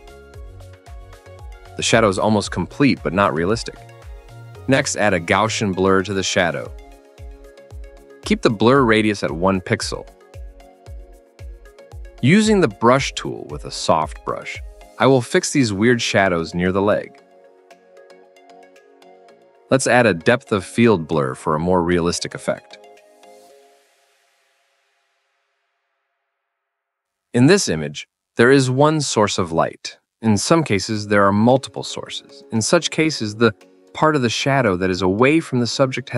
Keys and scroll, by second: 0.6-1.3 typing, 9.2 1, 9.5 Return, 11.1 1, 11.4 Return, 12.5-14.7 typing, 17.8 e, 18.6 ctrl+z, 26.2-27.0 typing.